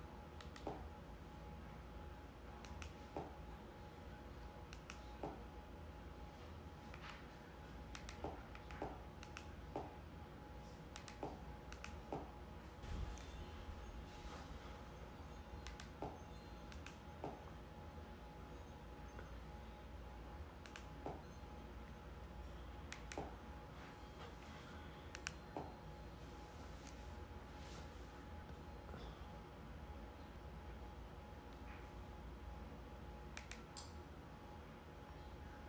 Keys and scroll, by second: 18.8 Return.